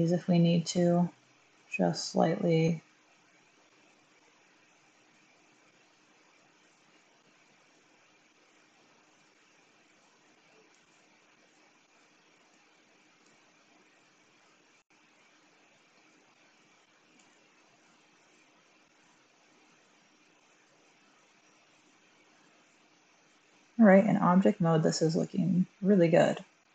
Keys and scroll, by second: 2.6 typing, 7.8 1, 17.1 1, 20.7 Tab.